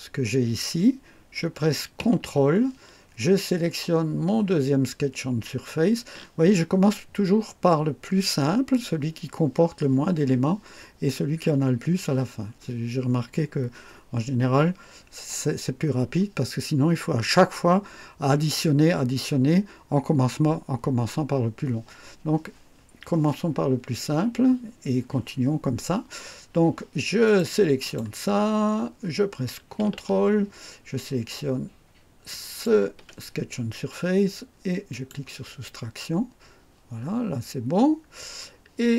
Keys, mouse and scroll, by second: 27.2 click, 27.8 click, 32.3 ctrl+click, 34.9 click, 36.9-37.3 scroll up 1, 37.7 scroll down 2.